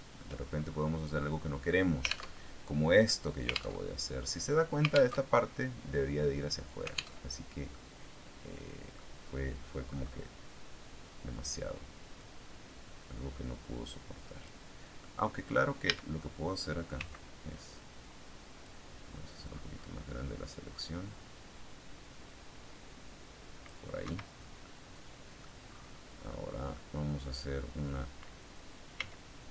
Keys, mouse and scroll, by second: 0.2 shift+scroll up 2, 0.9-1.4 scroll up 2, 2.3 alt+Tab, 3.7 alt+Tab, 5.2 alt+Tab, 7.1 alt+Tab, 7.6-9.0 middle drag, 9.8-11.7 scroll up 2, 12.1-14.6 drag, 14.9 middle click, 15.6-16.2 scroll up 1, 15.8 a, 17.5-18.7 drag, 20.2-23.8 drag, 24.0 Escape, 24.5 scroll down 1, 24.5 click, 24.6 middle click, 25.5-26.2 scroll up 2, 26.2 middle click, 28.9 c.